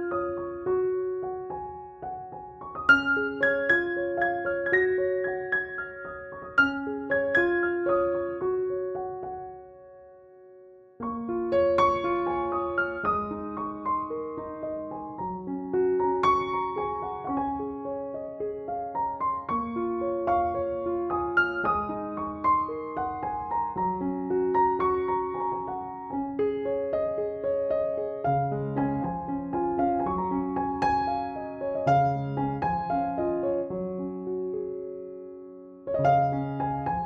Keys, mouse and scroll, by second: 1.9-4.4 typing, 2.1 click, 3.2 ctrl+=, 3.8-5.3 click, 4.6-6.8 drag, 6.9-10.8 typing, 7.0 click, 8.3 click, 8.9 click, 9.4-10.2 click, 10.5 click, 11.2-11.8 click, 12.0 [, 12.2 [, 12.5 click, 12.8 ], 13.0-13.5 click, 13.9-15.3 typing, 14.3 click, 15.4-17.3 drag, 17.5-19.4 typing, 17.7-18.0 click, 18.2 click, 20.0-31.2 drag, 31.5 ctrl+j, 32.0 ctrl+u, 33.0 click, 36.2-37.0 drag.